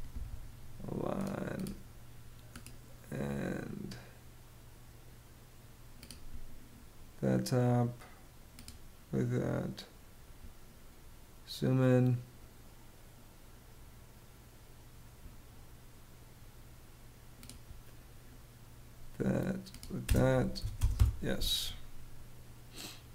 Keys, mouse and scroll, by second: 19.5 space, 20.1 y, 20.3 space, 20.4 Return.